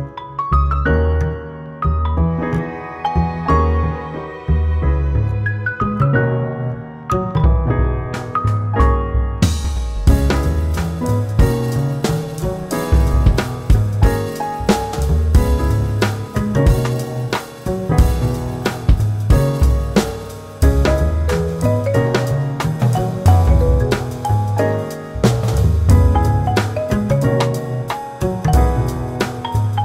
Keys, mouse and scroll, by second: 2.7 click, 7.2 q, 9.1 q, 10.3 q, 11.3 q, 12.1 click, 12.6 q, 13.2 q, 13.9 click, 14.3 q, 14.8 click, 16.1 double click, 16.5 q, 16.8 q, 17.2 q, 17.7 click, 18.7 q, 18.9 q, 19.4 click, 20.0 q, 20.2 q, 20.5 click, 21.3 q, 21.9 click, 22.6 q, 22.8 q, 23.0 q, 25.7 click, 29.3 q.